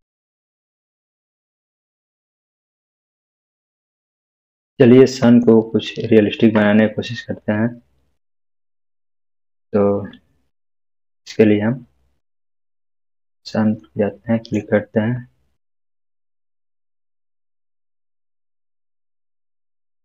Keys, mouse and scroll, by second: 0.0 click, 2.2 Num_Lock, 2.2-2.9 scroll up 1, 3.1-5.6 middle drag, 8.9-10.3 scroll up 1, 10.3-11.5 middle click, 10.8 Caps_Lock, 11.5-13.2 scroll down 1, 13.2 click, 13.8-14.7 middle drag, 16.1-18.3 drag.